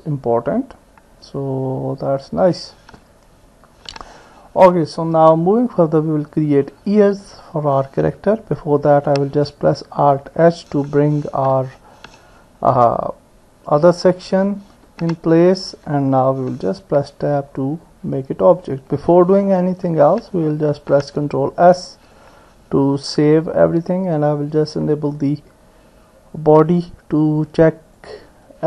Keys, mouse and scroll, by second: 0.5-2.6 drag, 3.7 ctrl+s, 5.1 click, 6.7 click, 7.2 middle click, 9.8 alt+h, 14.9 ctrl+s, 16.0 Tab, 17.1-19.0 middle drag, 20.8 ctrl+s, 22.2 click, 28.0 click.